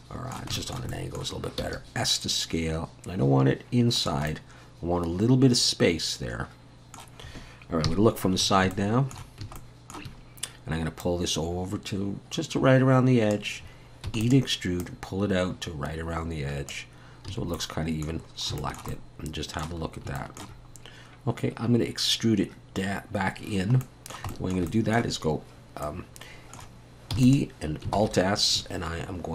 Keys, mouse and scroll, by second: 0.9 middle click, 1.6 s, 4.3 middle click, 7.9 KP_3, 8.4-8.7 scroll up 4, 8.7 shift+middle click, 10.1-11.0 scroll up 1, 14.1 e, 14.8 click, 17.3 a, 17.6 middle click, 18.2 scroll down 4, 18.6 shift+middle click, 18.9 middle click, 19.9 scroll up 2, 20.2 shift+middle click, 20.7 scroll up 1, 23.4 scroll down 1, 24.3 middle click, 24.3 shift+middle click, 24.7 middle click, 25.8 middle click, 26.3 shift+middle click, 27.1 e, 27.9 alt+s.